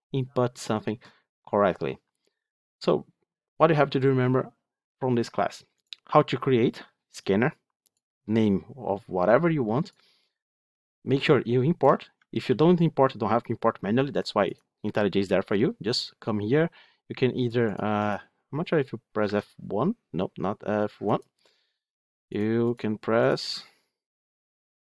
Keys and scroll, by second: 12.3 ctrl+x, 20.3 F1.